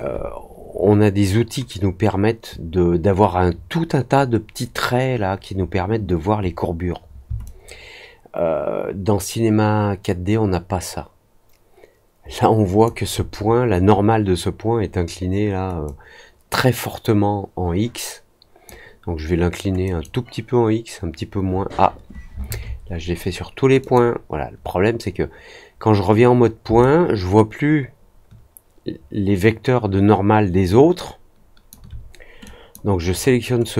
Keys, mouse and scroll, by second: 7.4-12.8 alt+drag, 15.8-18.6 drag, 19.8 click, 23.7 click, 26.7-31.6 alt+drag, 32.4 click.